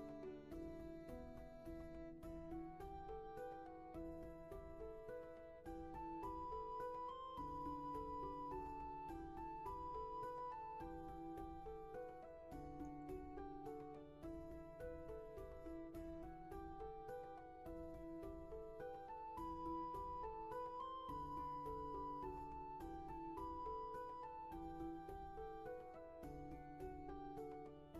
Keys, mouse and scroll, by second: 14.4 ctrl+z, 16.2 ctrl+z.